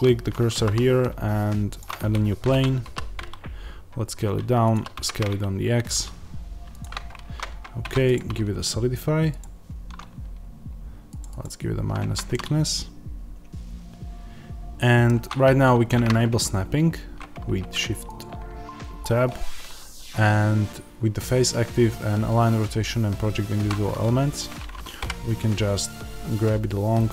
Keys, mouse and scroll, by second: 1.7 shift+a, 2.4 Tab, 2.7 s, 4.6 click, 4.7 s, 6.7 click, 11.9 Tab, 11.9 click, 12.2-23.6 middle drag, 15.6 shift+Tab, 23.6 click, 24.3 click, 24.9 g.